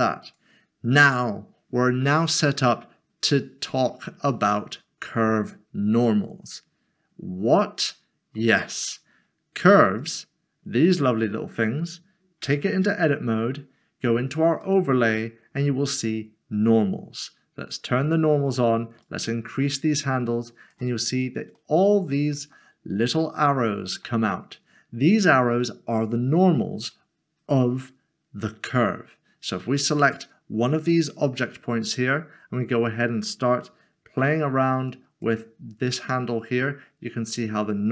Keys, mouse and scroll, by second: 0.2 click, 2.1 middle click, 4.3 shift+middle click, 7.9 middle click, 10.0 click, 10.8 click, 11.1 middle click, 12.4 Tab, 14.6 Tab, 14.9 click, 18.1 click, 21.6 middle click, 22.6 shift+middle click, 23.4 middle click, 30.1 click, 34.9 click, 35.9 typing.